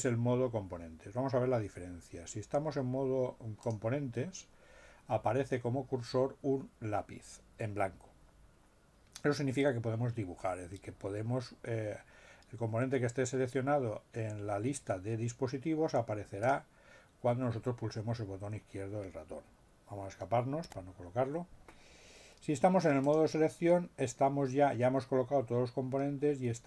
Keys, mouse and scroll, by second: 3.6 click, 16.4 click, 20.6 Escape, 23.0 click.